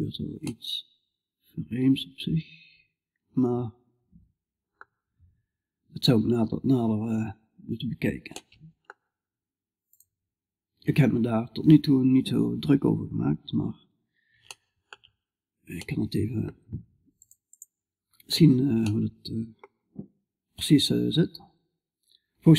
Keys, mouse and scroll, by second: 6.8-12.5 middle drag, 12.5 scroll up 1, 12.6-17.1 middle drag, 17.1-18.3 drag, 18.3-20.5 middle drag.